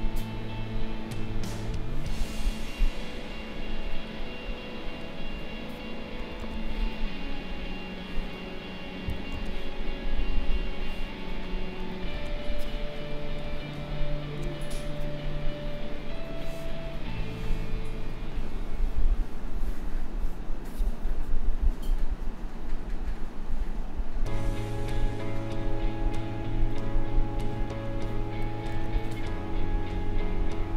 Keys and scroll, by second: 6.4 ctrl+z, 9.3 ctrl+z, 12.1 ctrl+z, 28.7 ctrl+z.